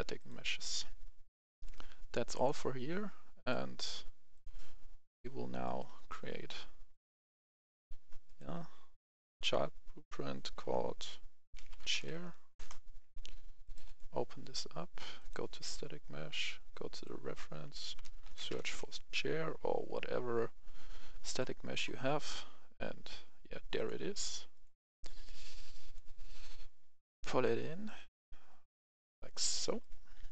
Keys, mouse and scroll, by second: 1.3 F10, 1.7-2.2 scroll down 1, 2.2 click, 5.8 right click, 6.8 click, 7.1 right click, 9.2 click, 11.5-12.0 typing, 12.5 Return, 13.5-16.1 drag, 17.9-18.6 typing, 21.2 click, 22.4-23.0 scroll down 1, 23.0-23.7 scroll up 1, 23.7-29.7 drag, 29.7 right click, 29.8-30.3 typing.